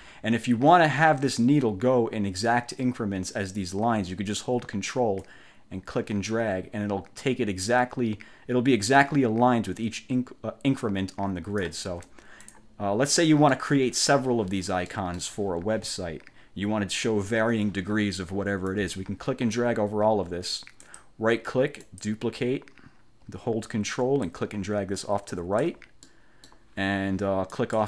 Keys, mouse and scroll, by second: 0.0 ctrl+z, 5.4-12.0 ctrl+drag, 12.1 ctrl+z, 12.6 ctrl+click, 13.2 click, 15.0 click, 18.8 click, 21.0 click, 22.0 click, 24.4-25.9 ctrl+drag, 26.2 ctrl+middle click, 27.6 click.